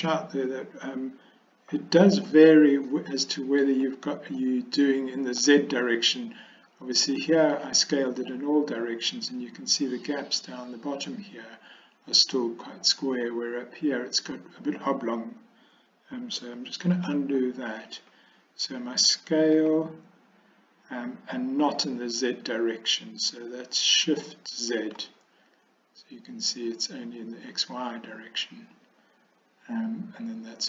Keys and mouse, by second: 3.0 middle click, 4.5-5.5 middle drag, 7.6 middle click, 16.9 ctrl+z, 19.6 s.